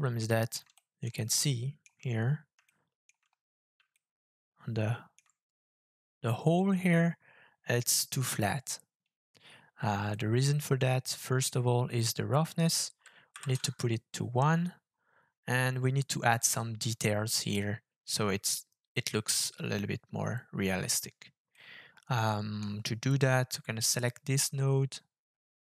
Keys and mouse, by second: 0.7 middle drag, 0.9 click, 1.0 middle click, 1.4 shift+middle click, 2.7-3.1 shift+middle drag, 3.9-5.2 shift+middle drag, 5.2 click, 10.1-11.5 drag, 12.3-13.6 drag, 13.6-14.6 drag, 21.5-22.6 middle drag, 23.1 click, 24.0-25.7 drag.